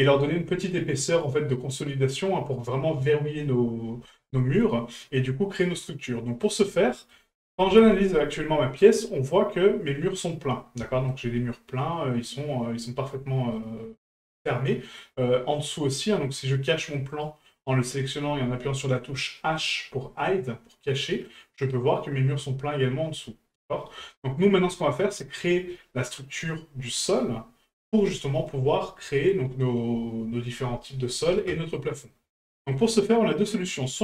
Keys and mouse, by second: 4.4-6.5 middle drag, 6.9 shift+middle click, 8.7-9.3 middle drag, 10.9 shift+middle drag, 13.5-15.0 middle drag, 15.7 middle drag, 17.1 right click, 20.8-21.2 middle drag, 24.1 shift+middle drag, 24.6-25.2 middle drag, 32.1-32.7 middle drag.